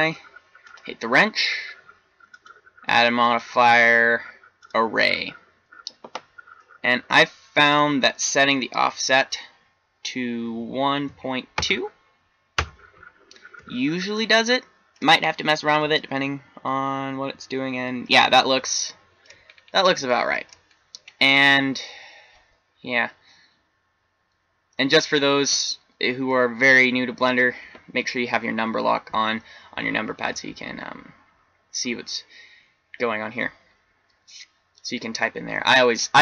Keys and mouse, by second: 15.2 middle click, 15.9-16.3 middle drag, 17.3 middle click, 17.5 middle drag, 19.1 middle click, 19.6-20.2 middle drag.